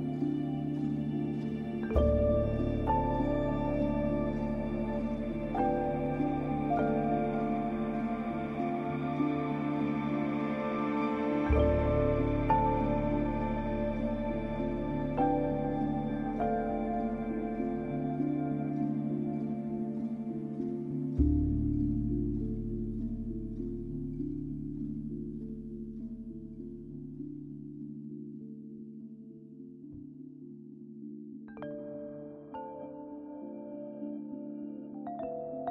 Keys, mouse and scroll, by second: 0.6 click, 2.3 scroll up 1, 3.0-7.8 drag, 4.1-4.9 typing, 7.5-8.3 typing, 7.8 scroll down 1, 8.8-14.6 drag, 15.0 click, 16.2 scroll up 1, 16.8 scroll up 1, 17.3 alt+click, 18.1 scroll down 1, 18.2-20.4 typing, 18.3-18.9 scroll up 2, 19.0 click, 23.4-26.0 typing, 23.6 click, 23.9 click, 24.2 click, 24.5 click, 24.7 click, 26.1 click, 27.2-28.5 typing, 27.9 click, 28.6-30.4 drag, 30.4 typing, 30.9-32.3 scroll down 1, 32.3 scroll up 1, 32.9 ], 33.0-35.7 drag.